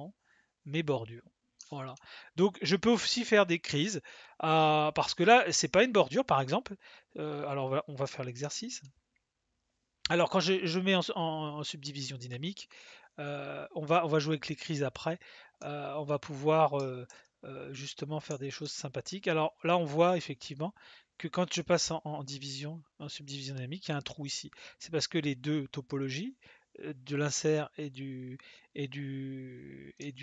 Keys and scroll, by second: 17.0 ctrl+z.